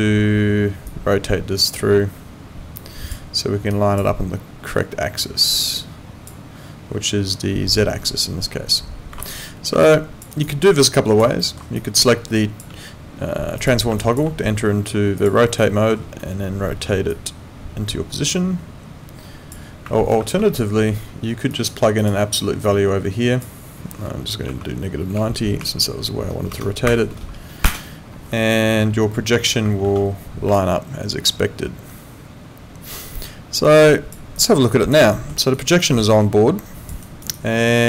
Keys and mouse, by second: 9.1 Escape, 9.8 alt+click, 10.3 alt+right click, 10.6 alt+click, 11.4 alt+middle click, 11.8 alt+click, 13.6 click, 14.0 alt+click, 15.2 click, 15.6 alt+middle click, 17.1 click, 20.2 ctrl+4, 30.0 ctrl+4, 30.5 alt+click, 34.4 alt+click, 35.1 alt+middle click, 35.5 alt+right click, 35.8 alt+click, 37.0 alt+right click, 37.3 alt+click.